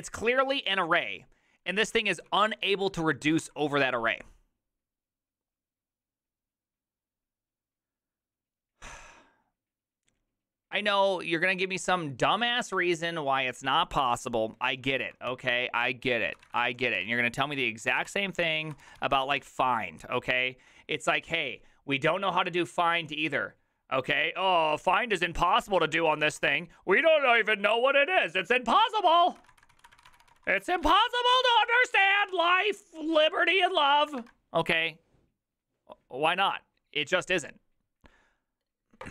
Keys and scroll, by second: 2.1-3.9 typing, 15.4 alt++, 15.4 alt+{, 15.8-19.9 typing, 26.1-27.2 typing, 29.4-32.2 typing, 31.9 ctrl+c, 32.1 ctrl+:, 32.2 Return.